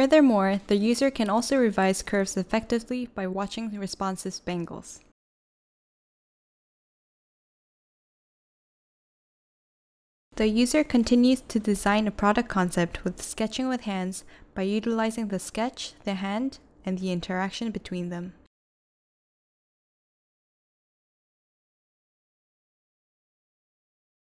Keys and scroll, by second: 0.3-1.0 typing, 2.6-4.4 typing.